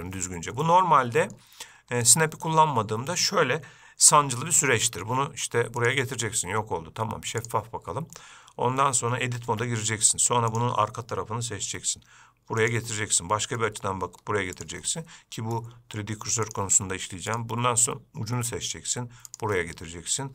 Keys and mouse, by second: 0.9-1.6 middle drag, 2.3 click, 4.3 g, 7.7-9.0 drag, 9.8 Tab, 10.8-11.9 drag, 11.9 g, 13.2 middle click, 14.0 g, 15.2 middle click, 16.1 g, 18.7 g, 19.8-20.3 middle drag.